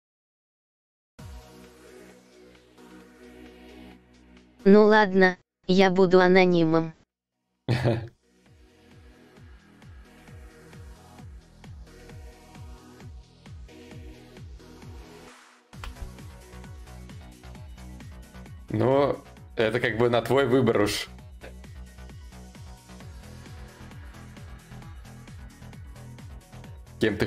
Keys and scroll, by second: 15.4 ctrl+z.